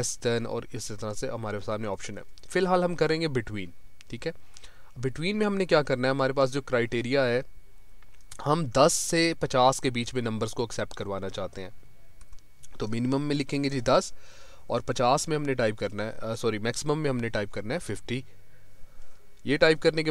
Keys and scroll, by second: 1.3 Up, 14.7 Tab.